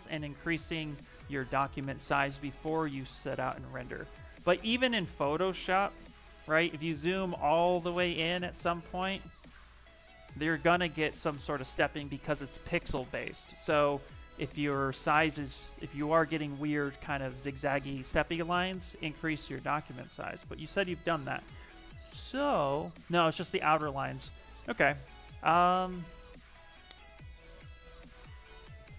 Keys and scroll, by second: 0.8 shift+m, 3.9 s, 5.4 shift+m, 9.7 s, 13.0 f.